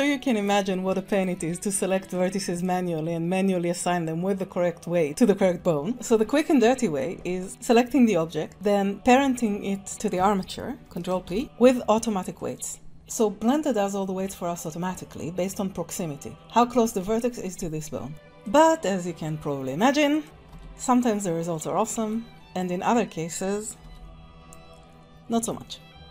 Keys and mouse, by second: 1.0 click, 1.3 Tab, 5.9 Tab, 7.4 click, 11.1 ctrl+p, 18.4 click, 20.2 ctrl+Tab, 20.5 g, 23.8 g, 26.0 middle click.